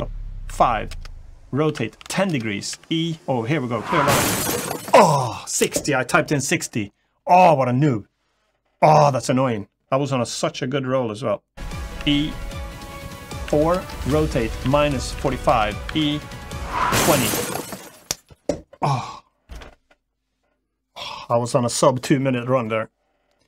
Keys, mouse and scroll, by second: 0.0 e, 0.3 5, 0.8 Return, 1.4 r, 1.8 1, 1.8 0, 2.1 Return, 2.5 e, 4.1 0, 4.1 6, 11.6 Return, 11.6 0, 11.6 e, 11.6 6, 11.8 e, 13.2-15.6 typing, 13.6 Return, 15.2 Return, 16.7 2, 16.7 0.